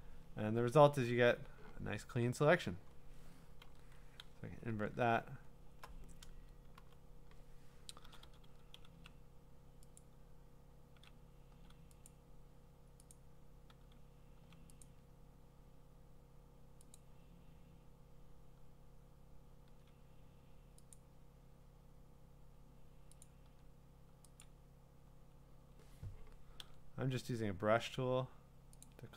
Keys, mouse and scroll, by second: 0.4 Return, 3.6 ctrl+i, 4.7 ctrl+d, 5.2-5.8 scroll, 6.8 b, 8.0 [, 8.2 [, 8.5 [, 10.0 click, 10.9 ], 12.1 click, 13.1 click, 13.7 [, 14.8 click, 17.0 click, 19.7 [, 20.9 click, 23.2 click, 24.4 click, 28.8 click.